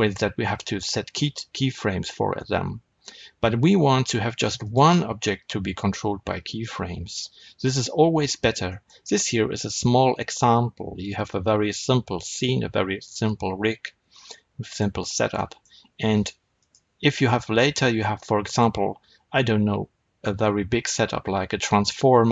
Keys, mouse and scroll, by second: 4.5 click, 7.0-8.8 middle drag, 8.2-8.6 scroll down 1, 14.1-16.5 middle drag, 16.5 click, 18.1-22.3 middle drag.